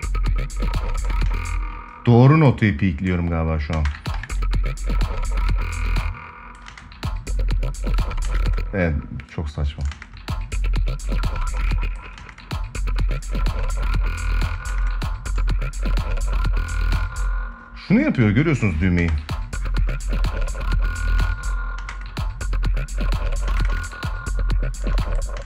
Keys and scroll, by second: 1.0 space, 3.4 space, 3.9 ctrl+s, 5.6 space, 7.9 space, 9.6 space, 11.3 space, 14.3 space, 16.7 space, 18.7 space, 20.9 space, 23.2 space, 24.6 space.